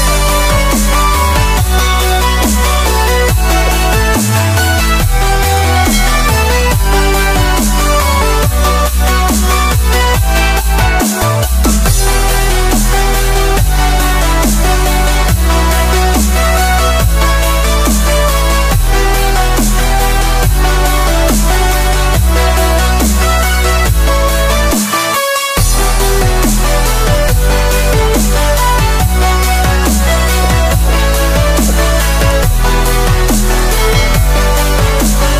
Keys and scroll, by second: 20.1 ctrl+shift+a, 21.0 ctrl+shift+a.